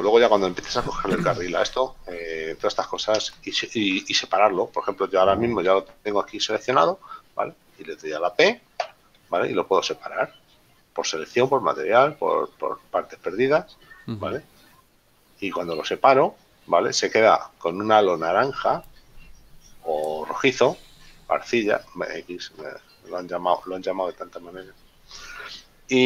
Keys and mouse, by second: 16.0 click.